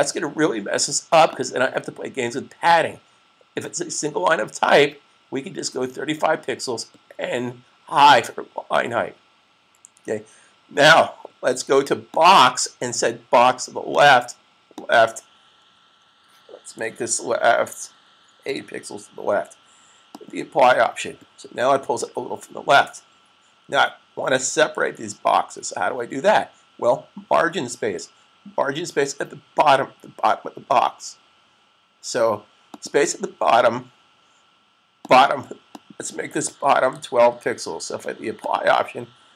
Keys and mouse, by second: 1.1 click, 12.1 click, 18.4 8, 20.1 click, 22.2 typing, 32.6 click, 36.5-37.4 typing, 38.3 click.